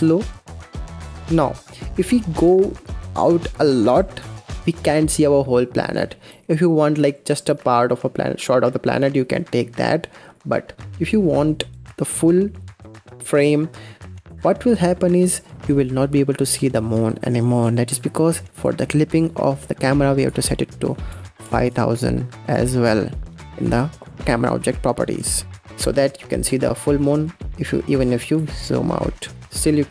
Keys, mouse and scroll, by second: 0.6 KP_0, 0.8-1.7 scroll up 5, 1.7-2.0 scroll up 1, 2.0-3.4 scroll down 3, 4.5 ctrl+z, 6.2 g, 7.4 g, 14.3-14.7 scroll down 4, 14.7-15.4 scroll up 6, 15.9 scroll up 1, 16.6-17.0 scroll down 1, 17.0 scroll up 1, 17.2-17.6 scroll down 1, 18.4 click, 20.1-21.5 drag, 21.5 KP_0, 26.3-26.7 scroll down 5, 26.7-27.1 middle drag, 27.1-27.6 scroll down 6, 27.6 middle click, 28.2 g, 29.6 KP_0.